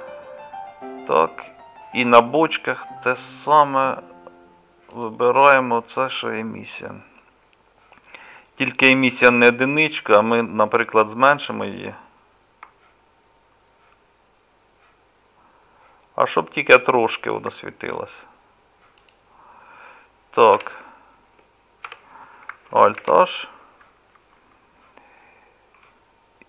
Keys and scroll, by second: 20.6 KP_Divide, 21.9 KP_Divide, 23.0 alt+h.